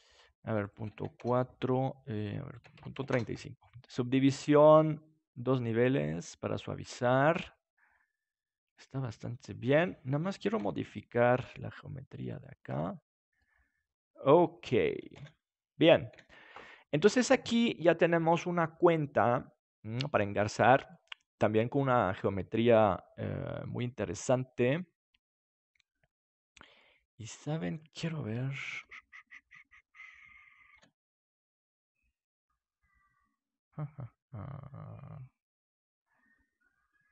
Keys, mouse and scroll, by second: 0.6-2.4 drag, 3.1-4.1 drag, 5.2-7.9 drag, 7.1 middle click, 10.5 Tab, 11.4 s, 12.4-14.1 drag, 12.7 Tab, 13.0-14.1 middle drag, 15.1 ctrl+s, 16.1 KP_7, 20.9-23.2 middle drag, 26.8-28.6 middle drag, 28.7 Tab, 30.7 w.